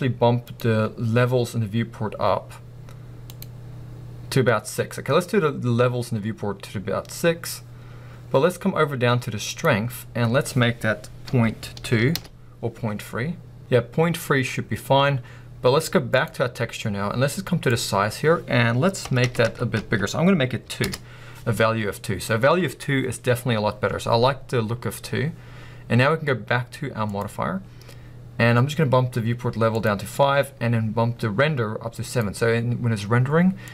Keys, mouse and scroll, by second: 10.4-33.7 drag, 13.2 Return, 20.9 Return.